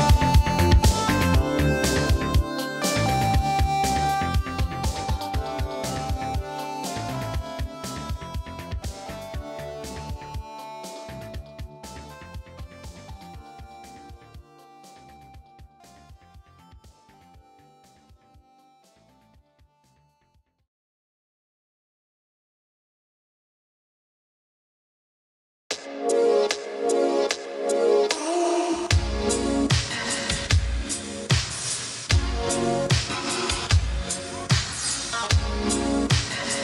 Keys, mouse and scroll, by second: 2.6 typing, 19.8 click, 25.5 1, 27.8 click, 32.1 click, 32.1 typing, 34.5-35.3 typing.